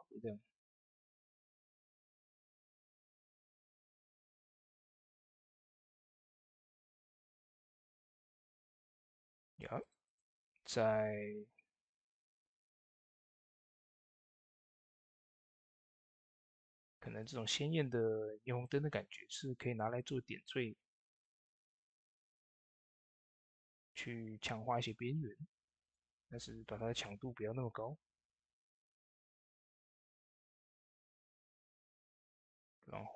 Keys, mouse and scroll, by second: 5.9-9.3 drag, 5.9-7.6 typing, 13.1 click, 13.1-13.9 typing, 13.1 click, 17.0 shift+d, 17.0-28.7 drag, 21.4 typing, 32.8 click, 32.8 typing, 32.9 click.